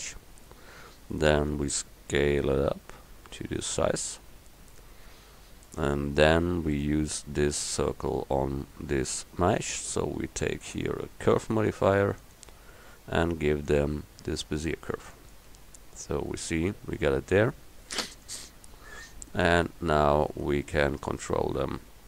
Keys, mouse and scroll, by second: 1.7 s, 4.9-10.5 drag, 12.4-13.7 drag, 21.1 s.